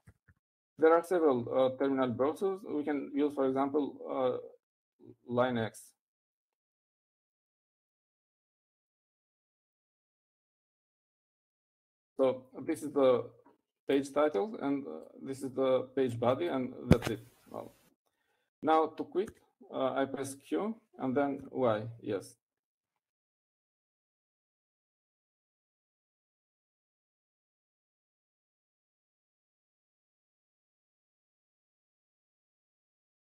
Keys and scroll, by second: 0.9-2.3 typing, 8.2-11.5 typing, 20.6 typing, 24.0-25.1 typing.